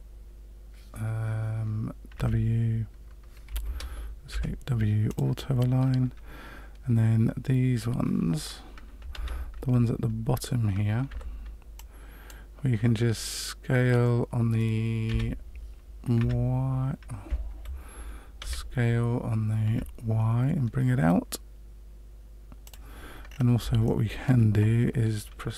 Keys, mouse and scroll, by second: 4.3 w, 9.1 alt+a, 11.0 c, 18.4 s, 23.2-23.5 scroll down 4, 23.8 shift+middle click.